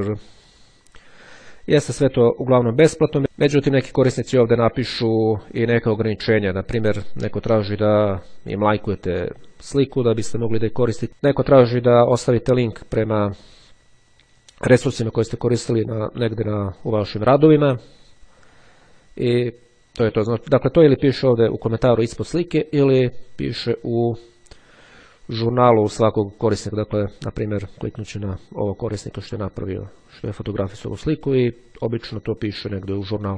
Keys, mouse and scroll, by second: 5.0-6.5 drag, 7.4-7.7 scroll down 1, 7.7-8.3 scroll up 1, 9.6-10.2 scroll up 1, 13.7-14.2 scroll down 1, 18.3-18.9 scroll down 1, 22.3-23.6 scroll up 1, 25.5-26.5 scroll down 1, 29.0 click, 29.9-30.9 scroll up 1, 32.9 click.